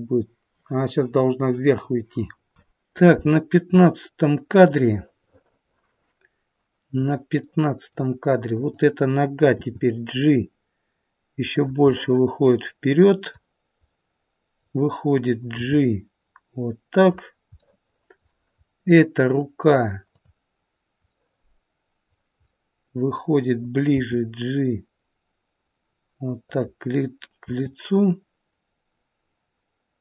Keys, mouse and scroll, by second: 3.8 middle click, 6.8 click, 7.3 middle click, 8.6 click, 9.5 g, 11.9 middle click, 13.8 middle click, 15.4 g, 17.5 middle click, 18.5-19.3 scroll up 1, 20.1 click, 20.1-20.5 scroll up 1, 20.9 scroll up 1, 21.1 middle click, 22.4 middle click, 23.9 g, 27.4 r.